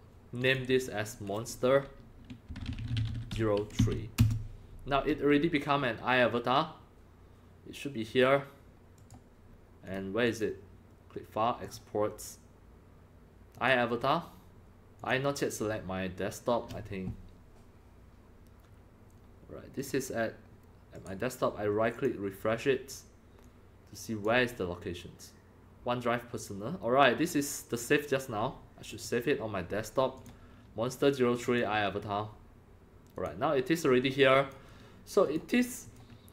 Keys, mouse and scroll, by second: 0.4 click, 2.5-5.1 typing, 4.2 Return, 9.0 click, 9.9 click, 10.3 click, 11.6 click, 13.6 click, 15.0 click, 18.8-21.0 drag, 21.0-22.0 right drag, 22.0 click, 23.4 click, 28.9 click, 30.2 click, 31.4 click, 32.1 click, 33.1 click, 34.2 click, 35.3 click, 35.4-35.7 drag, 35.8 click.